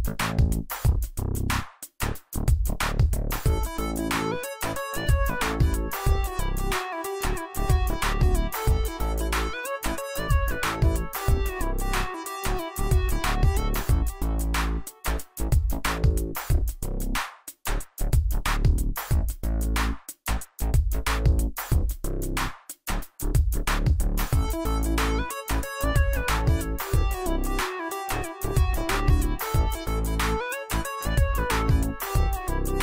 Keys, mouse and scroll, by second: 1.9 right click, 3.6-22.4 drag, 17.0-17.6 click.